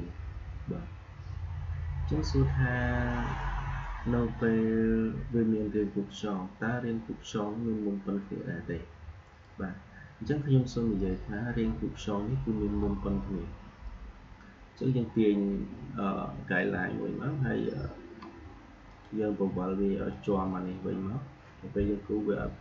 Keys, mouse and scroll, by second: 13.7-18.8 drag.